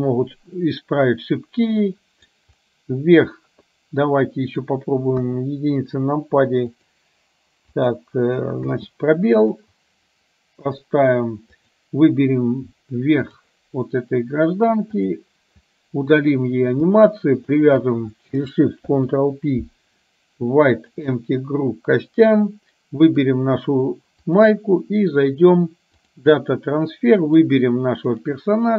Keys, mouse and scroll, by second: 2.0-2.3 middle drag, 4.5 middle click, 5.3 KP_1, 6.8-7.6 drag, 7.8 click, 8.7 space, 9.5 click, 10.8 click, 11.7 click, 13.3 click, 17.6 shift+click, 19.0 ctrl+p, 24.2-26.3 drag, 27.3 click.